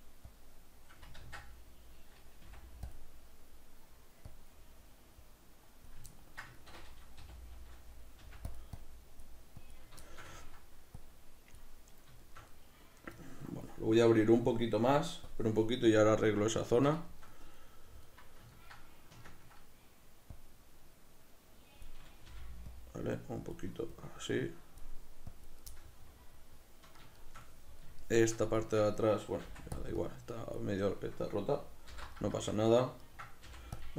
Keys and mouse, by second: 0.4-3.0 drag, 1.3 ctrl+z, 4.4-6.2 drag, 6.2-8.6 ctrl+middle drag, 7.3 g, 8.8-10.1 drag, 10.1 shift+middle click, 11.0-12.3 drag, 12.3-15.4 shift+middle drag, 15.4-17.1 drag, 17.1-20.4 shift+middle drag, 20.4-25.7 drag, 22.3 g, 25.7-29.9 middle drag, 29.5 f, 30.1-32.4 drag, 32.0 alt+m, 32.4-33.9 shift+middle drag, 33.5 f.